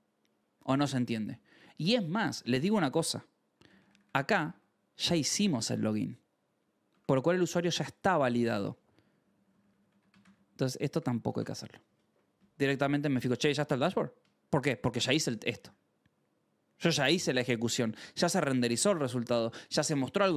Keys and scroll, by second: 0.7 k, 3.4 k, 4.4 shift+v, 6.8 Escape, 8.9-10.9 typing, 11.3 ctrl+s, 13.5 ctrl+s, 14.3-15.5 typing, 16.7 Escape, 18.1 shift+g, 18.5 k.